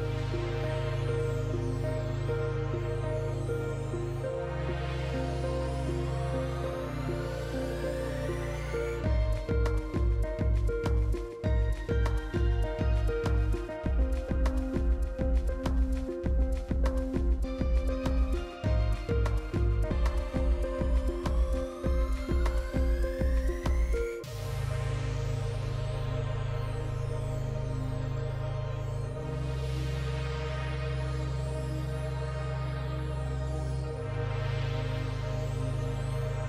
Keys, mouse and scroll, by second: 0.1 ctrl+d, 3.6 click, 11.6-13.8 typing, 15.6-31.9 drag, 34.4-35.9 drag.